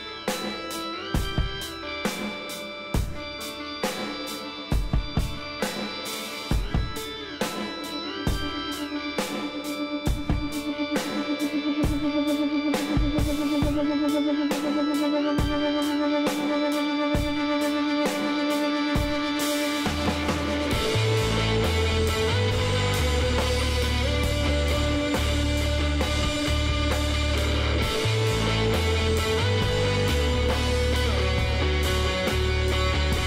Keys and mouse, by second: 4.4 middle click, 6.4 KP_7, 7.9-9.8 drag, 10.3 s, 12.4 middle click, 12.8 KP_1, 16.5 middle click, 17.1 middle click, 18.7 s, 20.1-21.3 drag, 21.7-24.1 middle drag, 22.6 s, 24.4-26.2 drag, 26.8-28.7 drag, 30.3 s.